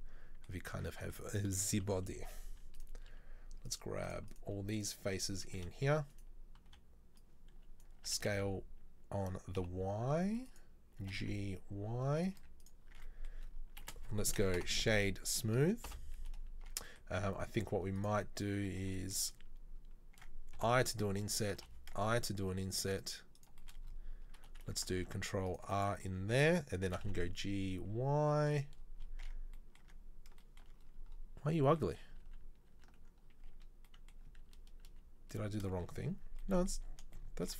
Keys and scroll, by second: 1.0 Tab, 1.9 KP_3, 2.3 z, 5.8 b, 6.7 b, 8.3 s, 11.1 g, 12.5 z, 13.1 Tab, 14.1 space, 16.7 Tab, 20.8 i, 21.6 i, 25.0 ctrl+r, 26.9 g, 29.3 Tab, 29.9 Tab, 32.4 ctrl+z, 32.8 ctrl+z, 33.6 a, 34.7 ctrl+z, 35.0 ctrl+z.